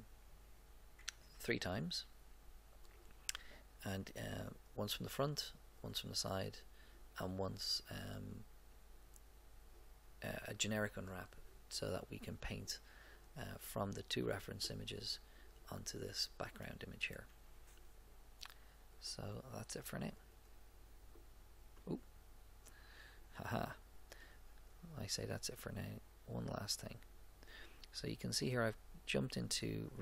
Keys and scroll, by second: 1.3 Tab.